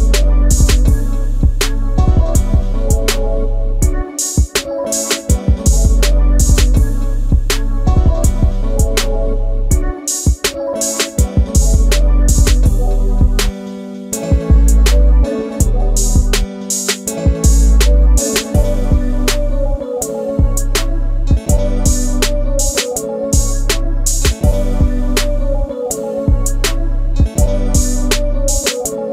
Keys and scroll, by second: 7.6 q, 11.5-12.2 typing, 13.3 *, 13.8 3, 13.9 Return, 16.5 shift+space, 18.4 Delete, 21.6 g.